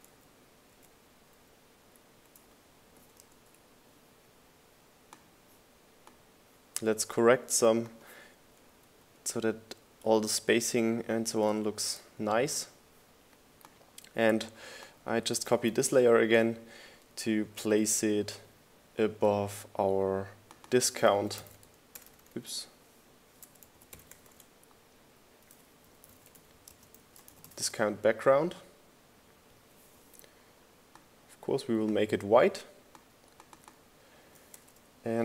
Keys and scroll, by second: 1.5 Down, 3.7 Up, 10.9 Up, 14.1 Down, 14.6 Up, 18.2 super+v, 20.4 shift+Left, 23.4-24.6 typing, 26.0-30.4 typing.